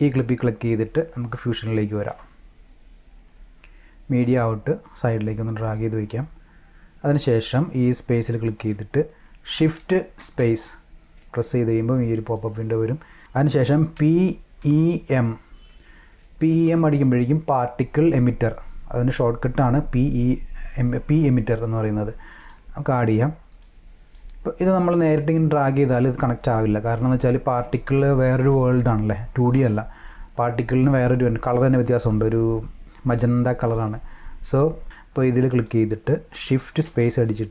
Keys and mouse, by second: 1.5 click, 4.2-5.7 drag, 7.2 click, 8.3 click, 10.2 shift+space, 14.0 p, 14.6 e, 15.0 m, 22.4 click, 23.6 click, 25.0-26.0 drag, 27.2-27.7 drag, 35.5 click, 36.8 shift+space.